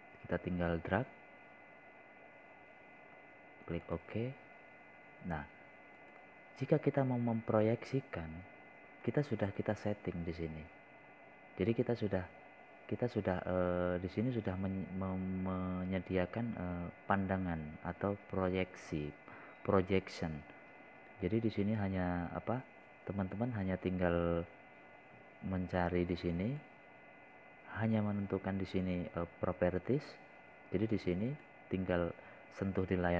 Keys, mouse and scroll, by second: 1.9-3.7 drag, 4.9 scroll down 1, 6.9 click, 12.6 right click, 17.4 click, 24.2 right click, 26.2 click.